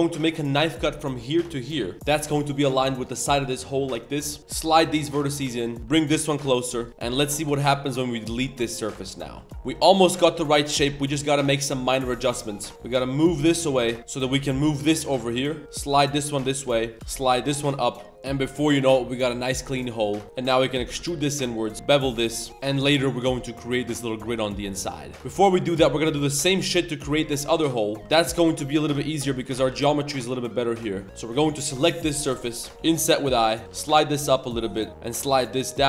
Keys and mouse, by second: 4.0 shift+middle click, 5.3 a, 5.5 shift+w, 5.7 shift+click, 5.8 z, 5.8 g, 6.6 click, 6.9 z, 6.9 g, 6.9 3, 7.3 ctrl+shift+click, 7.6 x, 9.1 Tab, 9.2 shift+middle click, 9.5 Tab, 9.5 z, 9.5 1, 9.8 click, 10.1 2, 10.1 click, 12.6 shift+click, 12.7 z, 12.7 2, 12.7 g, 13.2 click, 13.8 z, 13.9 click, 14.1 z, 14.2 g, 15.4-16.9 typing, 16.5 click, 18.1 Tab, 18.1-19.7 middle drag, 18.1 1, 19.8 shift+middle click, 20.1 Tab, 20.2 shift+s, 20.4 e, 20.7 g, 21.7 ctrl+b, 21.7 2, 22.5 Tab, 22.5 2, 22.5 1, 24.4 middle drag, 24.8 middle click, 25.1 shift+middle click, 25.1 KP_7, 25.1 z, 26.0 Tab, 26.3 3, 26.4 click, 26.7-27.2 middle drag, 26.7 z, 27.4 middle click, 27.7 shift+middle click, 28.0 KP_7, 28.0 z, 28.5 shift+middle click, 29.2 shift+middle click, 29.3 1, 29.6 a, 29.8 c, 31.0 3, 31.1 click, 31.6 ctrl+shift+click, 32.0 middle click, 32.7 middle click, 33.6 1, 33.6 z, 33.6 g, 34.7 middle click, 34.9 click.